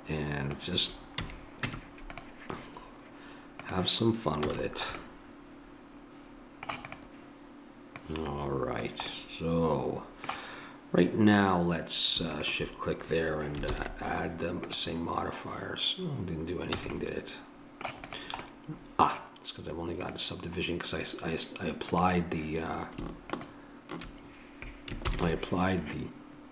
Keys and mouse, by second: 1.1 a, 1.7 Tab, 3.5-5.2 drag, 4.5 a, 6.9-9.5 drag, 9.5-12.3 middle drag, 12.3-13.7 drag, 13.7 ctrl+l, 16.8 a, 18.1-24.9 drag, 25.0 ctrl+l.